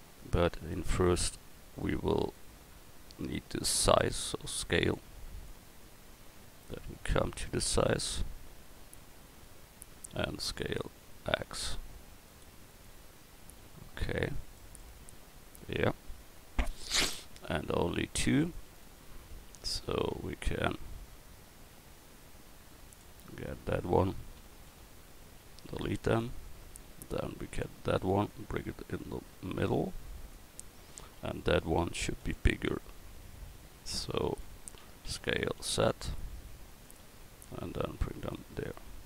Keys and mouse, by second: 4.0 s, 4.1 click, 7.0 s, 10.3 s, 14.6 click, 19.2 Tab, 19.7 a, 20.1 a, 24.7 l, 25.7 x, 27.6 l, 32.2 l, 33.4 a, 34.4 l, 35.1 s, 38.6 Tab.